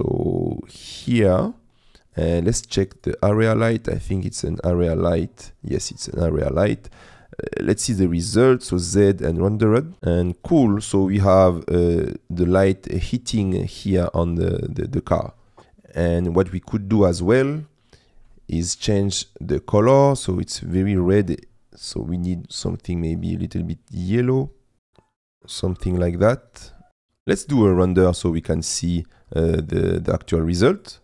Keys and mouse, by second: 4.7 click, 8.5 z.